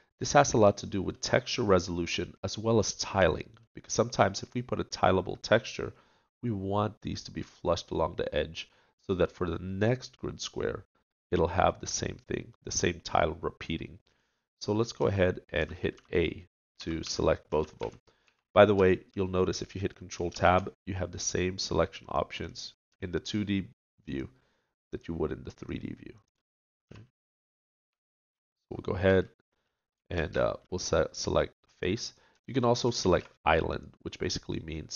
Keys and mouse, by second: 15.0-18.2 typing, 22.0 ctrl+Tab, 22.0 click, 24.0-32.4 drag, 26.8 a, 32.0 ctrl+Tab, 34.3 ctrl+Tab.